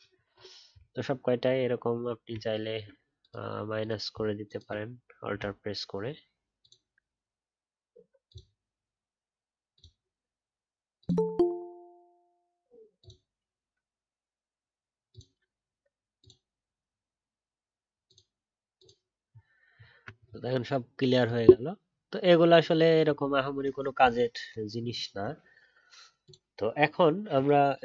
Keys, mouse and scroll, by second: 4.5 alt+click, 19.2 alt+scroll down 1, 19.7 alt+scroll up 1.